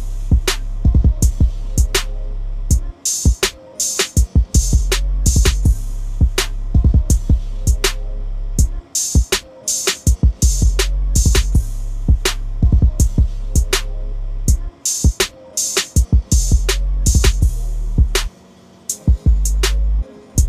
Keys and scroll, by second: 2.4-3.1 typing.